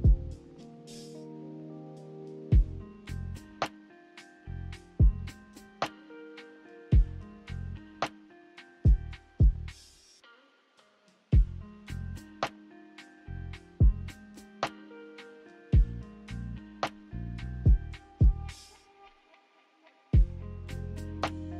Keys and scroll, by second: 0.0 m, 2.4 a, 7.9-9.8 typing, 15.9 1.